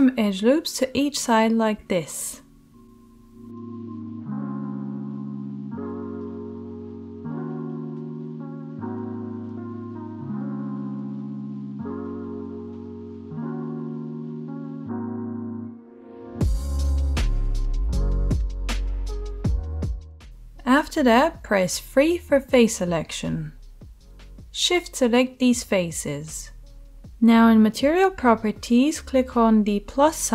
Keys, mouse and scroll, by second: 2.7 ctrl+r, 5.4 middle click, 5.4 right click, 5.8 ctrl+r, 9.7 right click, 9.8 middle click, 10.4 ctrl+right click, 10.9-13.2 ctrl+drag, 11.2 ctrl+r, 13.2-14.4 right drag, 14.4 middle click, 15.1-24.1 drag, 15.1 g, 21.4 3, 24.1-25.4 shift+middle drag, 25.4 shift+click, 25.8 shift+middle click, 25.9 shift+click, 26.4 shift+middle click, 26.5-29.8 shift+right drag, 29.8-30.3 middle drag.